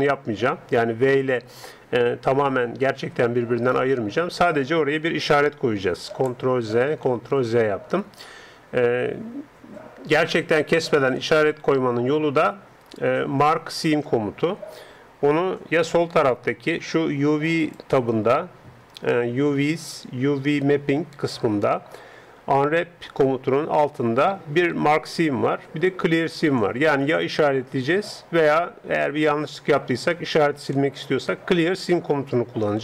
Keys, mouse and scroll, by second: 1.4-2.9 drag, 3.1 g, 6.3 ctrl+z, 7.1 ctrl+z, 10.9-17.6 middle drag, 17.6-21.7 drag.